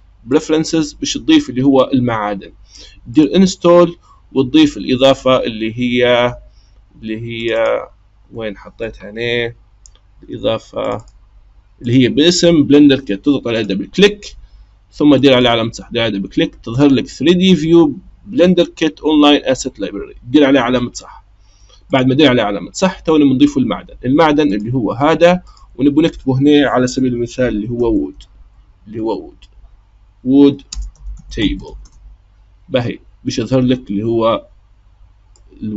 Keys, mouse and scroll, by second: 24.6 click, 25.4-28.5 drag.